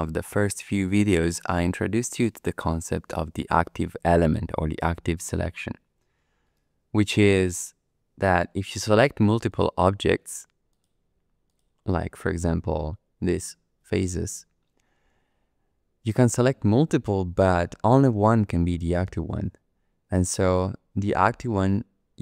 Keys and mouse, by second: 6.5 Tab, 9.5 click, 10.3 3, 10.7 click, 11.4 click, 12.2 click, 12.3 typing, 13.2 shift+click.